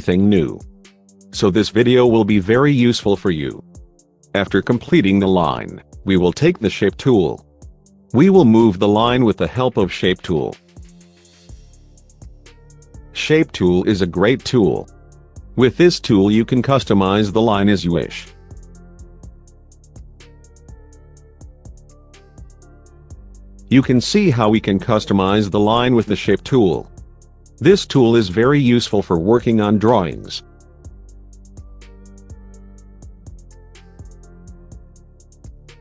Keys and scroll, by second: 4.2 F3.